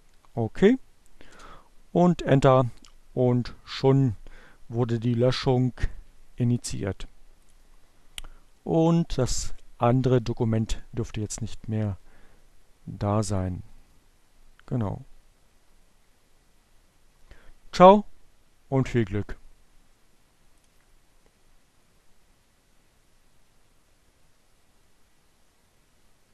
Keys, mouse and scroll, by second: 6.5 click, 11.9 click, 19.4 click.